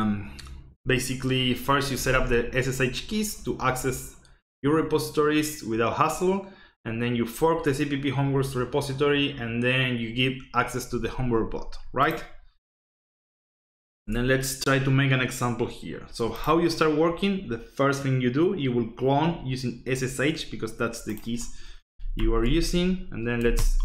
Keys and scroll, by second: 14.0 alt+Tab, 22.1 ctrl+alt+Down, 23.5 ctrl+alt+t.